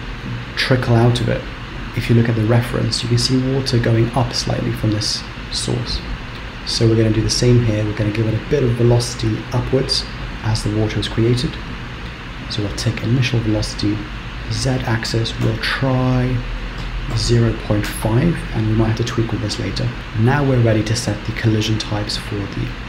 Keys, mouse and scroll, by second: 12.7 click, 13.0-14.0 scroll down 4, 14.0 click.